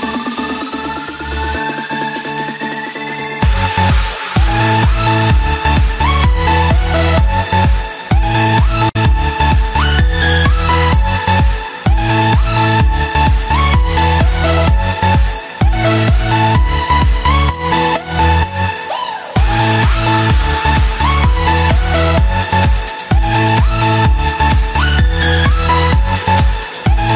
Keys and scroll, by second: 7.3 ctrl+a, 21.0 ctrl+a.